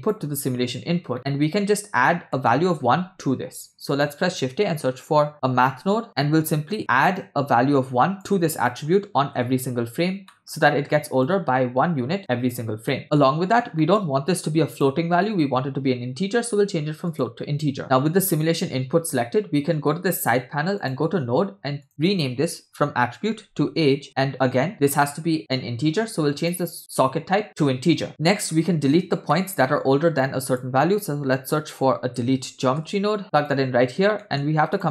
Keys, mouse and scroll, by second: 0.9 scroll down 2, 1.1 middle click, 1.6 scroll down 1, 2.3 middle click, 3.0 shift+a, 6.2 middle click, 6.6-7.2 scroll up 1, 7.2 scroll up 1, 7.2-8.3 drag, 8.6 click, 10.3 middle click, 11.3-12.7 drag, 12.9-13.2 middle drag, 13.2 scroll up 2, 13.8 middle click, 14.0 scroll up 2, 14.7-17.3 drag, 17.8 middle click, 17.8-19.3 scroll down 2, 20.8 click, 21.9-24.0 drag, 24.5-26.4 scroll down 3, 26.4 scroll down 2, 26.4-27.6 drag, 28.1 middle click, 28.1 click, 29.3 middle click, 29.8 shift+a, 34.0 scroll up 1, 34.2 middle click, 34.8 drag.